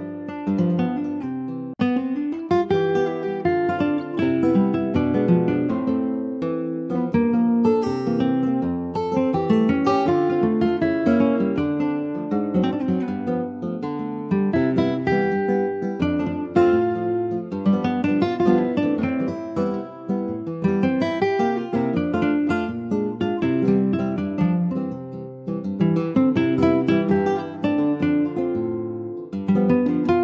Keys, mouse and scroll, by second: 4.6 click, 6.2-10.2 drag, 10.2-12.1 middle drag, 12.1 click, 13.1 click, 14.4-17.4 drag, 18.0-22.9 drag, 22.9 middle click, 23.4 scroll up 2, 23.8-25.5 shift+middle drag, 25.5-28.0 drag, 28.0-28.4 scroll down 2, 28.4 Tab, 28.9 scroll down 1, 29.1 middle click, 29.7 ctrl+s, 29.7 click, 29.9-30.2 right drag.